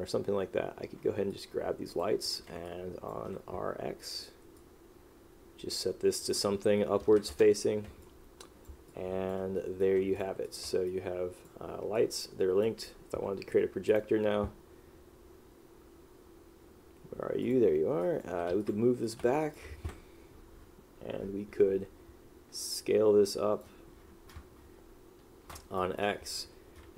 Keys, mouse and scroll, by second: 2.8 click, 7.4 Return, 9.0 click, 10.3 click, 11.0 click, 12.1 click, 18.2 click, 18.6 alt+w, 18.7 click, 19.5 click, 25.9 click.